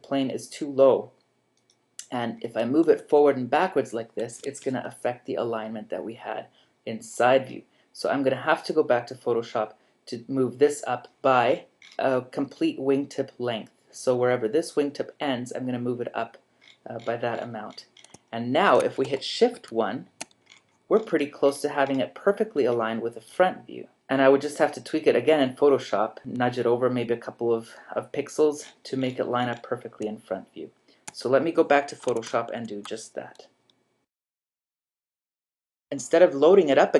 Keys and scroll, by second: 2.9 g, 4.4 Escape, 19.6 shift+1, 32.2 super+Tab.